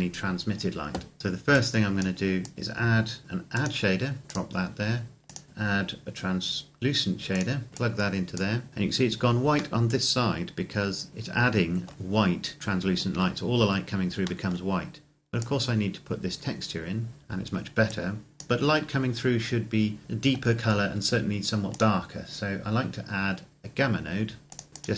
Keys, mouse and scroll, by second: 1.2 click, 7.4 click, 9.6 middle click, 15.4 click, 19.4-21.0 scroll up 1, 21.6 click, 24.7 click.